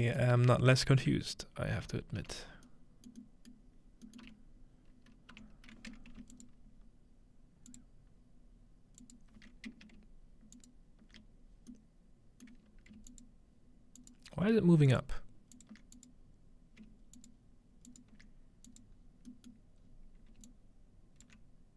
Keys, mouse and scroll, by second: 1.0 m, 1.8 m, 2.7 middle drag, 2.7-4.1 scroll up 2, 3.8-6.0 middle drag, 4.2 m, 5.3 m, 6.4 alt+shift+click, 7.7 alt+shift+click, 9.0 alt+shift+click, 10.6 alt+shift+click, 11.3 alt+shift+click, 12.5-14.1 middle drag, 13.1-14.1 alt+shift+drag, 14.9 alt+shift+click, 15.6 alt+shift+click, 16.0 click, 17.2-19.6 alt+shift+drag, 19.0-19.9 scroll down 2, 19.6-21.0 middle drag, 19.9 scroll up 1, 20.5 alt+click.